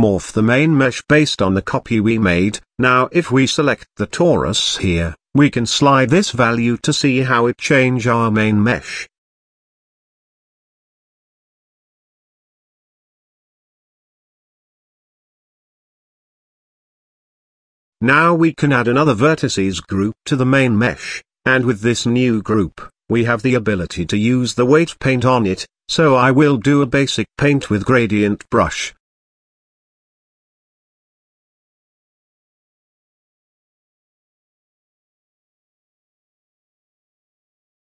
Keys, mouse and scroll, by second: 4.2 click, 4.9-6.3 scroll down 3, 6.5-9.0 drag, 14.0-15.0 shift+middle drag, 15.0 click, 17.2 click, 21.0-22.8 drag, 22.8 KP_7, 23.5-24.7 shift+middle drag, 24.7-27.1 drag, 27.1-29.6 shift+middle drag, 33.3-34.4 drag, 35.3 click, 37.7 click.